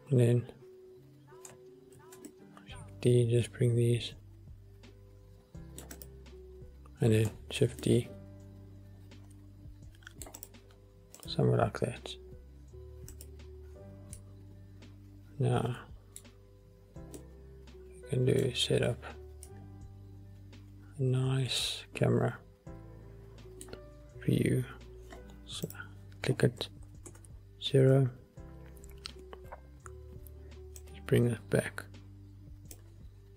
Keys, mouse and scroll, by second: 2.2 shift+d, 2.3-2.7 middle drag, 7.4 click, 7.7 shift+d, 7.9 middle click, 10.5 click, 11.3 click, 12.4-13.2 scroll up 2, 13.3 click, 14.3-15.0 middle drag, 16.6-17.3 scroll down 2, 17.3 middle click, 18.9-19.6 scroll up 2, 19.6 middle click, 20.8-23.8 middle drag, 25.2-25.8 scroll up 2, 25.8 click, 27.2 ctrl+alt+KP_0, 30.9-32.8 drag.